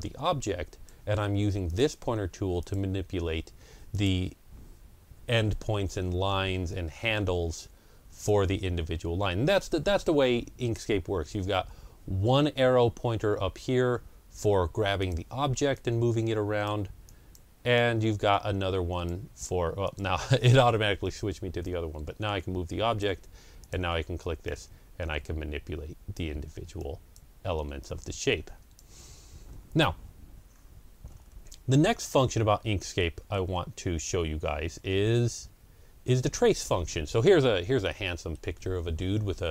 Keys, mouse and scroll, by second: 2.7 click, 8.9 click, 28.7-31.9 drag, 31.0 scroll up 1, 31.9-33.7 middle drag, 33.1 scroll up 1, 33.7 scroll down 1, 34.4 scroll down 1, 35.3 ctrl+scroll up 1, 36.8 scroll down 1, 37.8-39.5 middle drag.